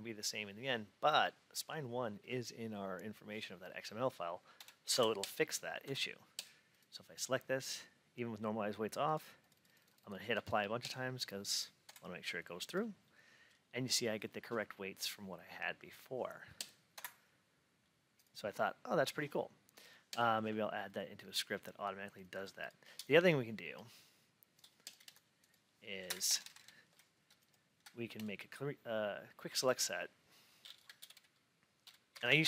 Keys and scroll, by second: 4.5 F8, 11.7 F8, 16.8 F8, 25.9 Down, 26.1 ctrl+Up, 32.0 shift+BackSpace.